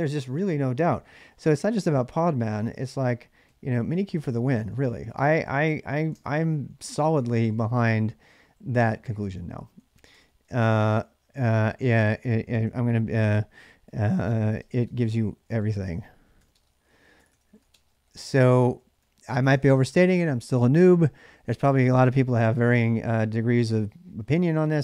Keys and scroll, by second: 1.7-20.4 typing.